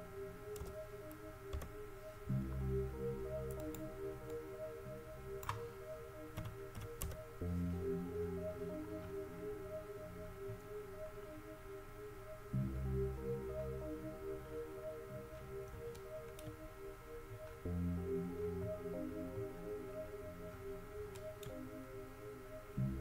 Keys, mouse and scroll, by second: 3.8-5.2 drag, 8.8-9.5 middle drag, 10.5 middle click, 10.5 scroll up 1, 12.0 middle click, 13.0 middle click, 14.1-14.8 middle drag, 14.8-15.4 middle drag, 15.9-16.2 middle drag, 16.4 middle drag, 19.3-20.7 middle drag, 21.2-23.0 middle drag.